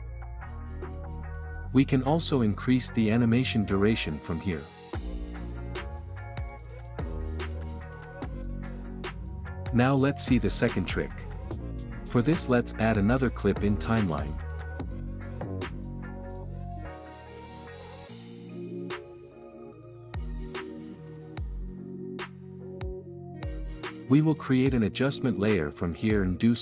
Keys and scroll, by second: 6.5 space.